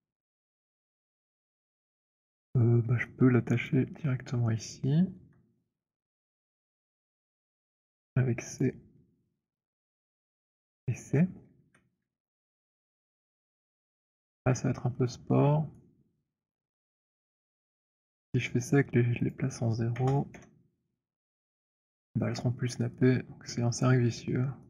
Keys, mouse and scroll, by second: 1.0 middle click, 3.7 alt+click, 4.5 alt+middle click, 4.9 alt+middle click, 8.4-12.0 typing, 8.6 click, 12.4 alt+middle click, 13.0 alt+right click, 13.0 alt+middle click, 13.8 alt+middle click, 15.7 right click, 17.5 click, 19.3 click, 20.1 typing, 20.2 Return, 21.9 middle click, 22.8 middle click, 23.6 alt+click.